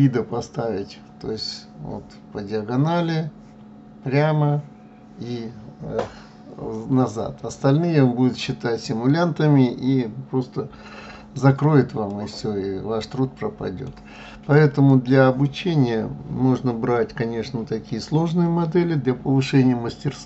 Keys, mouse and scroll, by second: 12.1-14.9 middle drag, 14.9 click.